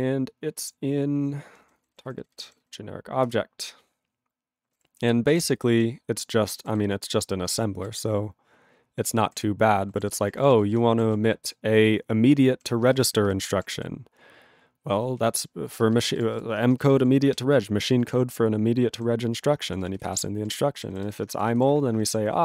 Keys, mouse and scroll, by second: 3.6 Return, 4.7 ctrl+=, 5.1 ctrl+n, 5.7 scroll down 1, 5.8-6.6 ctrl+n, 6.8-9.3 ctrl+n, 10.0 ctrl+=, 10.2 ctrl+p, 10.4 ctrl+p, 10.5 ctrl+p, 11.4-12.7 ctrl+p, 13.0 alt+f, 13.1 alt+f, 13.2 alt+f, 14.4 ctrl+n, 15.7 ctrl+space, 16.1 ctrl+alt+b, 16.3 ctrl+g, 16.6 ctrl+space, 17.0 ctrl+alt+f, 17.3 ctrl+g, 18.1 ctrl+alt+b.